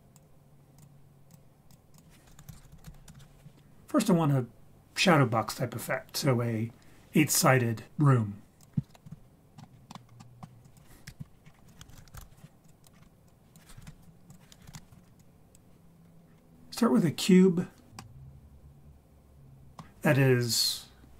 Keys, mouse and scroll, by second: 0.0 click, 0.8 click, 1.7 click, 1.9 click, 2.7 o, 8.6 click, 8.9 KP_1, 9.2-9.9 scroll down 2, 9.6 middle click, 9.9 middle click, 9.9 scroll up 2, 10.2 middle drag, 10.2 scroll down 1, 10.6 click, 11.1 Delete, 11.3 scroll down 1, 11.4 scroll up 4, 11.7 click, 11.8 shift+a, 13.2 click, 14.3 click, 15.2 drag, 15.8-17.9 scroll down 10, 18.0-19.8 middle drag.